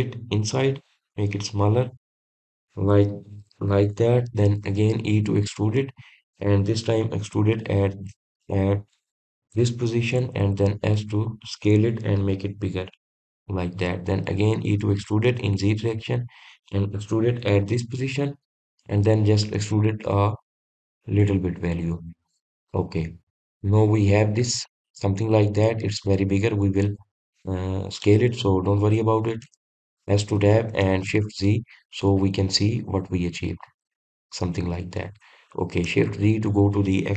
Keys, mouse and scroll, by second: 23.1 click, 23.7 scroll down 1, 24.2-27.2 middle drag, 32.6 shift+z, 33.2-36.3 middle drag.